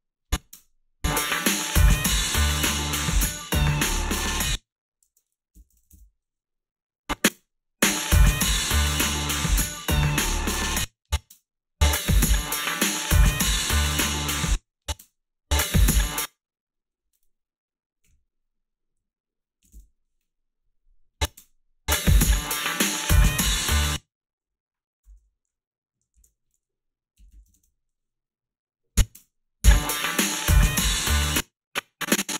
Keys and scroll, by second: 0.5 space, 4.3 space, 5.3-6.2 typing, 7.3 space, 10.5 space, 11.3 space, 14.3 space, 15.0 space, 16.0 space, 18.1 KP_Subtract, 19.6 KP_6, 21.4 space, 23.7 space, 25.1 ., 26.1 alt+shift+s, 27.2-28.0 typing, 29.1 space, 31.1 space.